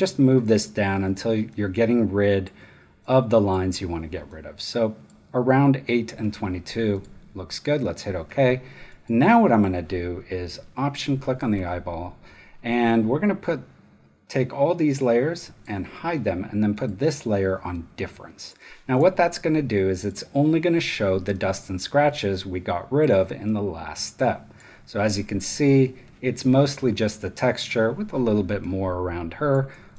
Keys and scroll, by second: 18.9 space.